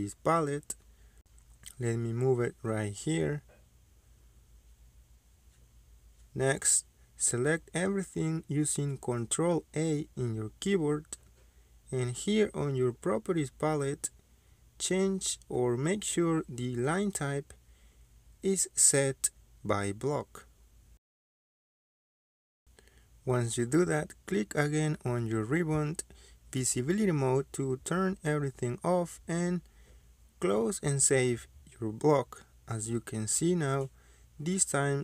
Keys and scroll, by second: 0.3-0.6 typing, 1.2 Return, 8.2 ctrl+a, 9.9 Escape, 24.2 ctrl+a, 28.3 Escape.